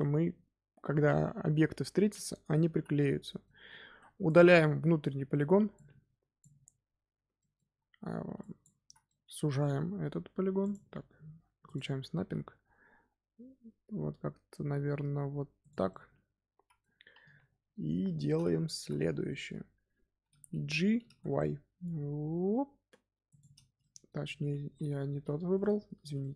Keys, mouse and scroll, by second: 0.0-2.3 scroll down 1, 2.6 z, 2.9-3.8 middle drag, 3.8 3, 4.2 click, 5.0 x, 6.9-7.3 scroll down 2, 7.3 middle click, 7.6 z, 8.3 click, 8.8 z, 9.0 middle click, 9.6 g, 11.6 click, 12.1 g, 15.8-17.1 middle drag, 17.1 KP_1, 18.3-18.7 scroll up 1, 18.7 z, 19.2-20.9 shift+middle drag, 20.9 g, 23.7 middle click, 24.3 ctrl+z, 25.5-26.0 middle drag, 26.0 3, 26.1-26.3 middle drag.